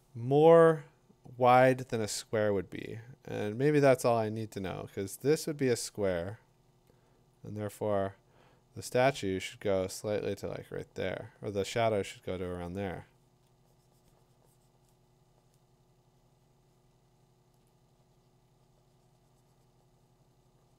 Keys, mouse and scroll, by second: 7.3 click, 9.5 click, 12.9 ], 13.4 ], 17.7 click.